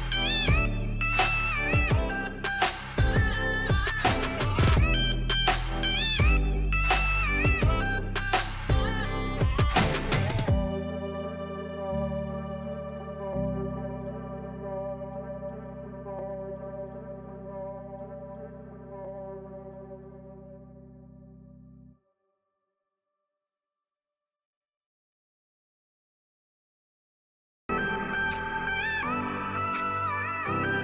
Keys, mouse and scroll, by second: 3.0 right click, 4.3-6.4 drag, 6.3 Delete, 7.9 click, 8.8-10.3 drag, 10.3 ctrl+z, 13.2 click, 25.5-30.8 drag.